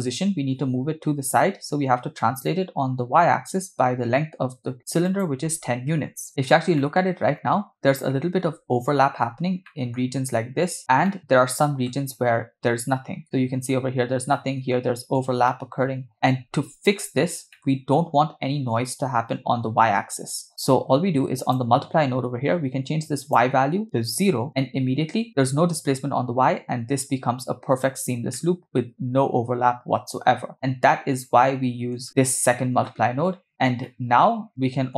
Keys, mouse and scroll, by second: 2.4-4.9 shift+drag, 5.1-6.3 shift+drag, 6.3 scroll up 3, 6.9-8.4 middle drag, 9.2 scroll up 2, 9.7-10.1 middle drag, 11.1-11.9 middle drag, 13.2 scroll down 2, 13.3 middle click, 14.4-14.7 middle drag, 15.5 middle click, 17.5 middle click, 21.4 click, 23.2-24.3 drag, 28.4-31.9 middle drag, 32.1 click, 33.5 scroll down 5, 33.9-34.9 middle drag.